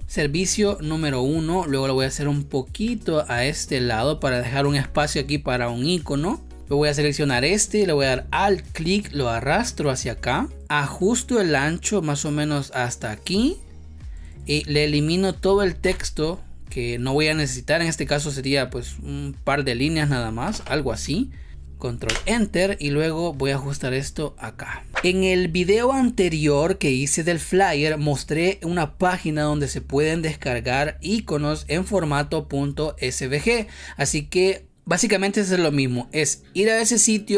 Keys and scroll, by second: 15.7 Delete, 20.3 BackSpace, 22.0 ctrl+Return.